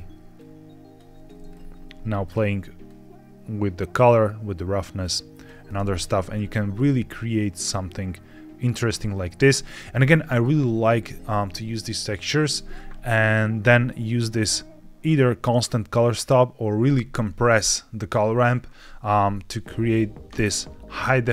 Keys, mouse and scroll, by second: 0.2 click, 1.4-2.1 scroll up 2, 2.1 click, 6.8-7.1 scroll up 2, 7.4 scroll up 1, 8.8 scroll down 1, 9.6-10.0 scroll down 2, 10.0 shift+middle click, 13.9 middle click, 19.0-20.6 scroll down 1.